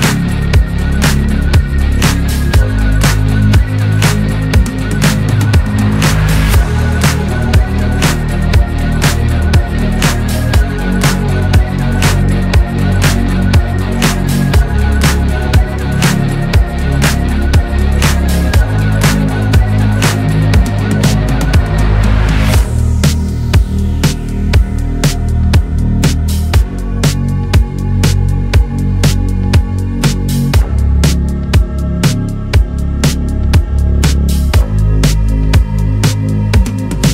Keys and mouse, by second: 9.8-13.7 drag, 16.3 click.